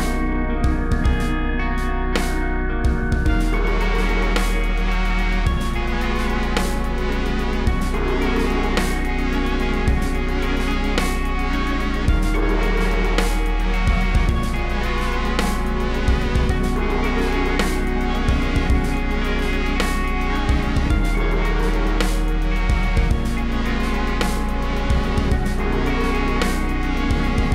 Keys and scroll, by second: 0.2-2.3 typing, 3.4-4.7 typing, 9.8 super+z, 11.1 super+z, 11.2 super+z, 11.3 super+c, 12.0 super+v, 13.0 super+z, 13.6 super+v, 13.9 super+z, 14.4 BackSpace, 14.7 BackSpace, 17.4 shift+super+{, 17.6-20.1 typing, 21.9-25.4 typing, 24.5 super+v, 26.8 super+z.